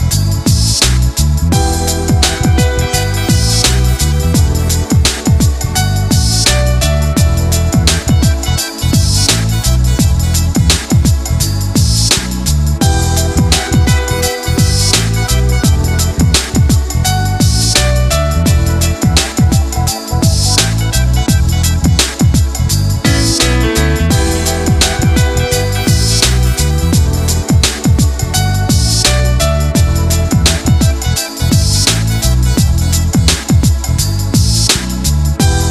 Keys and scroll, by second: 31.3 ctrl+z.